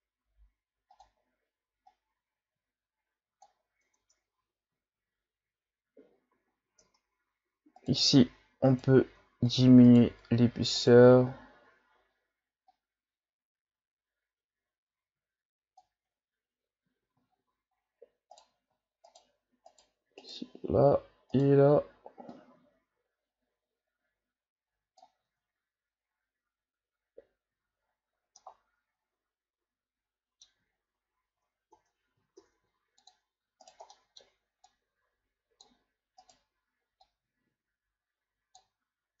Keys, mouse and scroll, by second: 1.9-3.9 drag, 3.9 Tab, 4.5-5.7 scroll down 1, 6.0-6.8 shift+scroll up 5, 6.8 Tab, 7.8 right click, 8.7 right click, 9.5 shift+right click, 9.9 shift+right click, 10.8 shift+right click, 12.7-15.7 drag, 16.9 ctrl+z, 17.3-18.3 shift+scroll up 6, 18.3 right click, 19.1 shift+right click, 19.7 shift+right click, 20.2 shift+right click, 21.3 shift+right click, 22.3-25.3 drag, 25.3 Tab, 27.0-27.9 scroll down 3, 27.9-28.4 shift+scroll down 6, 28.4-30.7 middle drag, 30.7 shift+scroll down 1, 31.0-31.7 scroll up 3, 31.7 Tab, 32.4 ctrl+Tab, 33.6 right click, 33.9 middle click, 34.7-36.2 drag, 36.2 right click, 37.0-39.2 drag.